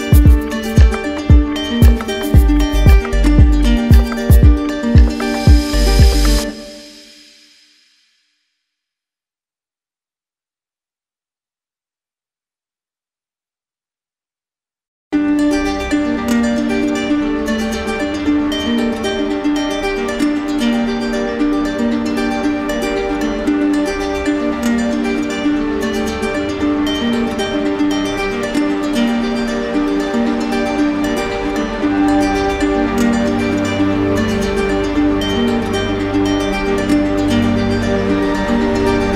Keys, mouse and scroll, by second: 5.8-6.9 drag, 7.6-8.7 drag, 12.3 shift+click, 13.5 click, 24.4 click, 25.6 alt+click, 27.9 click, 28.1 ctrl+z, 31.2 click, 31.3 ctrl+z, 38.9 click.